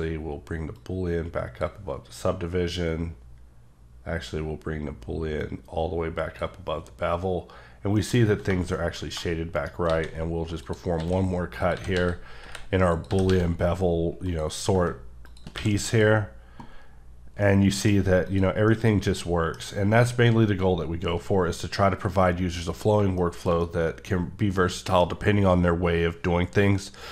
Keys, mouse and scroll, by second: 1.1 click, 2.3-2.6 scroll down 1, 3.1-4.8 scroll up 2, 5.4 click, 7.7 scroll down 1, 8.0 middle click, 8.8 shift+middle click, 9.6 shift+right click, 9.9 a, 10.6 click, 11.0-13.3 typing, 11.6 click, 12.9 click, 14.3 click, 15.6 q, 15.9 click, 17.4 middle click, 18.3 click, 18.7 middle click, 23.0 shift+middle click, 23.0 shift+Num_Lock, 23.5 shift+scroll, 23.6 middle click.